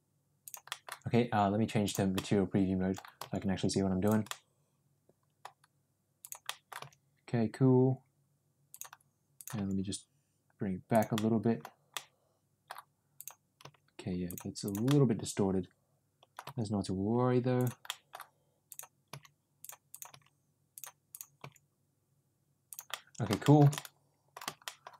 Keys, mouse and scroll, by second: 0.8 middle click, 1.9 click, 2.2 middle click, 3.3 g, 4.4-5.5 middle drag, 6.5 middle click, 6.8 g, 9.6 g, 11.3 middle click, 12.0 middle click, 13.2 click, 13.7 g, 14.7 click, 14.9-16.4 middle drag, 16.5 g, 18.0 middle click, 19.2 g, 20.2 g, 21.2 click, 21.5 g, 23.0 middle click, 23.5 shift+middle click, 23.9 middle click, 24.8 middle click.